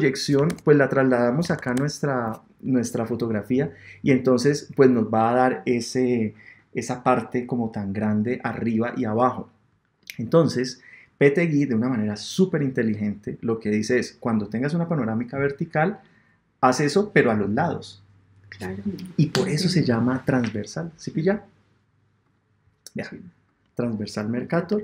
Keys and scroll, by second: 0.5 super+Tab.